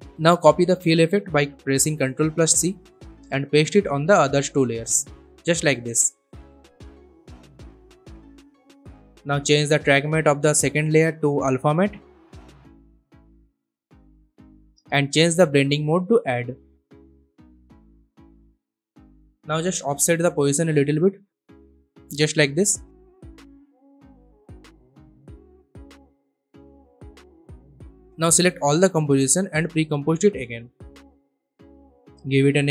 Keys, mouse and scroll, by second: 1.8 ctrl+c, 2.3 click, 3.1 ctrl+v, 3.6 ctrl+click, 3.8 ctrl+v, 5.0-6.6 drag, 15.1 click, 17.6-18.4 scroll up 2, 19.9-24.0 drag, 21.6-24.0 drag, 24.0 alt+scroll down 1, 25.1-27.6 drag, 29.1 right click, 30.1 click, 32.4-32.7 typing.